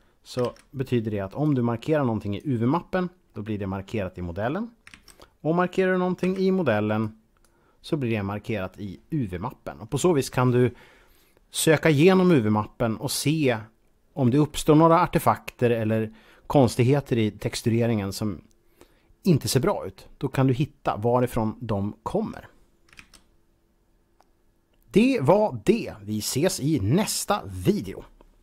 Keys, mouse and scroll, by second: 0.3 alt+a, 1.3 click, 3.2 middle click, 4.8 alt+a, 6.0 b, 7.0 click, 8.3 middle click, 22.9 alt+a.